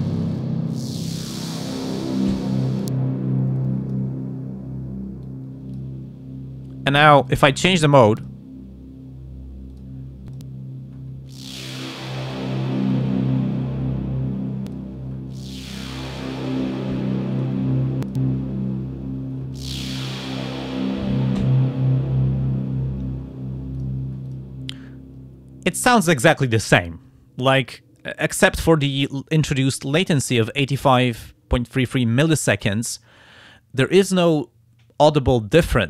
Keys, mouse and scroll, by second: 2.7-4.1 drag, 4.2-4.8 scroll down 2, 5.2 click, 7.3 click, 8.2 click, 9.7 click, 10.3 click, 12.8 click, 14.7 click, 17.3 click, 18.0 click, 23.8 click, 24.3 click.